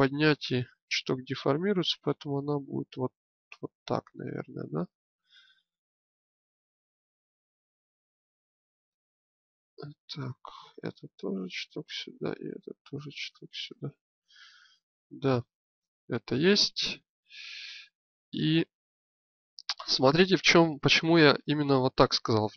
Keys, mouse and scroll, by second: 1.4-2.7 drag, 3.8 click, 4.1-5.3 middle drag, 9.1 click, 15.5 Tab, 17.8-22.5 drag.